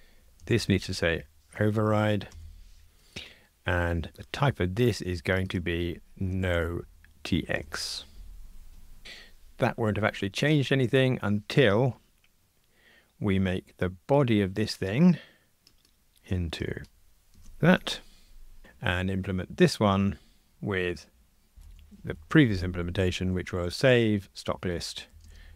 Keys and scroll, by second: 2.3 Return, 7.7 Return, 15.7 super+c, 17.4 super+v, 18.6 alt+super+l, 24.5 Return.